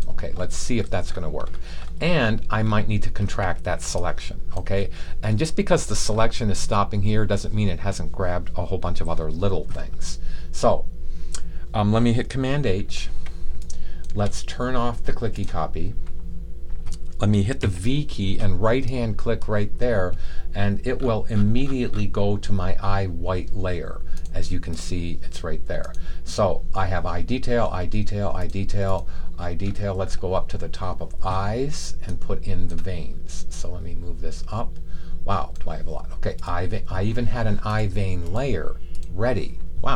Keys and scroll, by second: 12.6 super+h, 14.1 super+h, 17.5 v.